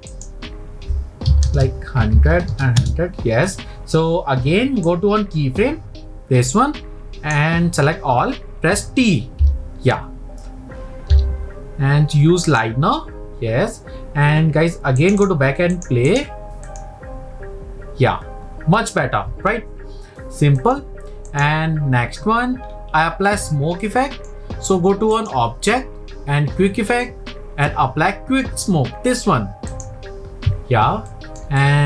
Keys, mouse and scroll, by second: 0.0-1.6 drag, 1.6 KP_0, 2.9 KP_0, 4.9 click, 9.8 t, 11.1 t, 15.1-18.2 drag, 20.8-22.6 drag, 22.6-23.2 scroll down 1, 23.2 scroll down 1, 23.4-25.1 middle drag, 25.1-28.3 drag, 31.1-31.8 shift+middle drag.